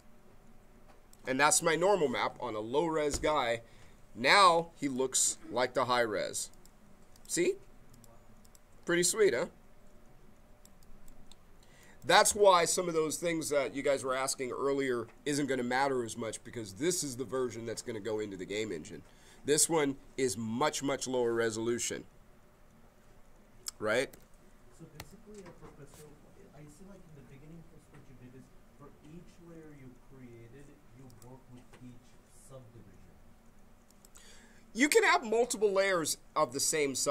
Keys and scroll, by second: 24.1 Page_Down, 24.9 Page_Up.